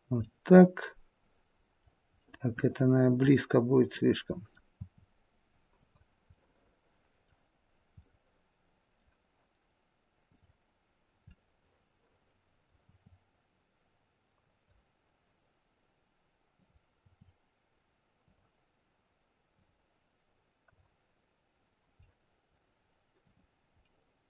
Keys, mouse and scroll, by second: 0.2 middle click, 2.2 middle click, 4.7 r, 6.3 middle click, 7.7-9.3 scroll up 3, 8.0 middle click, 10.2 click, 11.3 middle click, 12.8 r, 16.5 click, 17.1 r, 19.5 click, 20.7 click, 22.0 middle click, 23.2 click, 23.8 middle click, 23.8-24.2 scroll up 1.